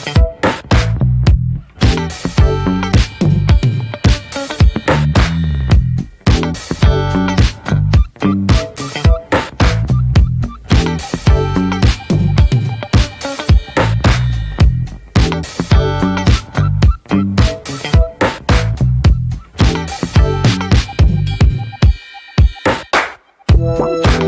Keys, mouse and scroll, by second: 1.2-2.0 scroll up 4, 2.0-3.5 scroll up 1, 3.5 click, 3.7 middle click, 3.8 scroll up 1, 4.0-5.0 drag, 5.0 shift+middle click, 5.2 scroll up 1, 5.3 click, 5.8 shift+middle click, 6.2 click, 6.5 shift+middle click, 6.8 click, 7.3 scroll down 1, 7.5 shift+middle click, 7.7 click, 7.9 shift+middle click, 8.0-8.5 scroll up 3, 8.3 ctrl+z, 8.5 click, 9.0 middle click, 9.3 click, 9.5 shift+middle click, 9.9 click, 10.1 middle click, 10.3 click, 10.6 shift+middle click, 10.9 scroll up 1, 11.1 click, 11.5 middle click, 11.8 click, 12.0 middle click, 12.2 click, 12.5 shift+middle click, 12.7 click, 13.1 middle click, 13.1 scroll down 1, 13.5 click, 13.8 shift+middle click, 14.1 click, 14.3 middle click, 14.6 click, 15.1 middle click, 15.6 click, 16.1 shift+middle click, 16.5 click, 16.9 middle click, 17.1 click, 17.7 middle click, 17.9 click, 18.3 middle click, 18.6 click, 19.0 middle click, 19.2 scroll up 2, 19.4 click, 19.6 scroll down 2, 19.8 middle click, 20.0 click, 20.1 shift+middle click, 20.5 click, 20.8 scroll down 1, 20.8 middle click, 21.1 click, 21.3 middle click, 21.5 click, 22.0 middle click, 22.3 click, 22.6 middle click, 22.8 click, 23.2 middle click, 23.5 click, 23.8 middle click, 24.0 click.